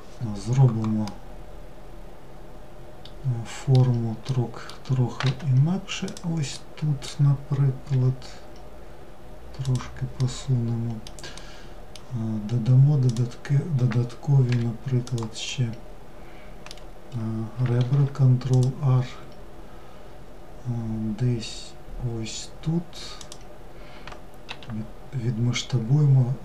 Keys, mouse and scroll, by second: 0.2-3.3 middle drag, 3.5-4.4 middle drag, 4.4 1, 5.3 click, 5.7-7.1 middle drag, 7.1 g, 9.4-12.2 middle drag, 12.2 click, 14.7-17.0 middle drag, 17.0 ctrl+r.